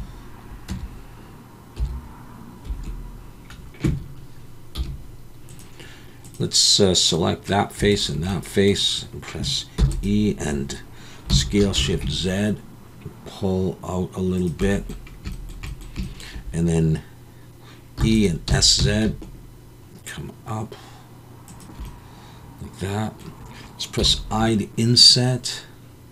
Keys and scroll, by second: 0.7 Tab, 1.8 3, 2.7 Escape, 4.7 t, 9.8 e, 11.3 s, 11.7 shift+z, 18.0 e, 18.5 s, 18.8 z, 24.4 i.